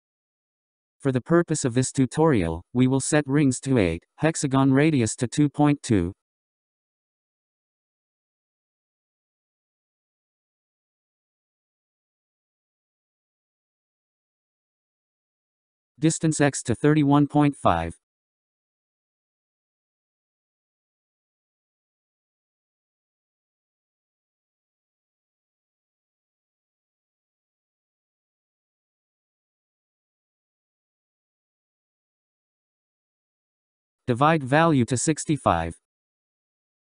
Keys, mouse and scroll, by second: 0.5-1.6 scroll down 8, 1.6-2.6 scroll up 4, 2.6-4.0 scroll up 17, 4.0-6.5 drag, 7.5-10.7 drag, 12.7-15.3 scroll down 16, 15.3-17.0 scroll up 10, 17.0-18.4 scroll up 7, 20.7-23.9 drag, 33.4-34.7 scroll down 11, 34.7-35.7 scroll up 11, 35.7-36.8 drag.